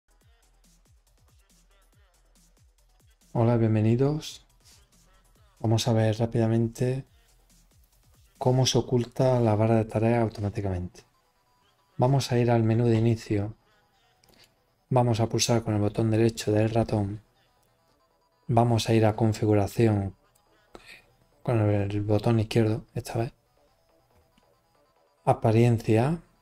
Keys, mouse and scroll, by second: 7.7 click, 14.1 right click, 19.0-20.2 drag.